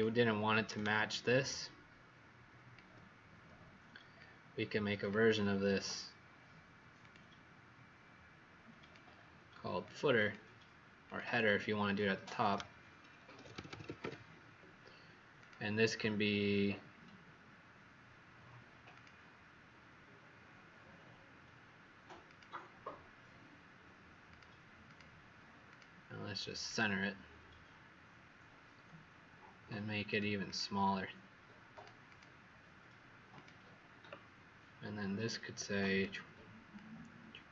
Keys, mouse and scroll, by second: 0.6 alt+click, 4.1 click, 10.1 click, 11.0 click, 11.2 click, 13.0-14.4 typing, 15.3 click, 24.8 click, 25.7 click, 30.4 click, 31.6 click, 32.0 click, 33.3 click.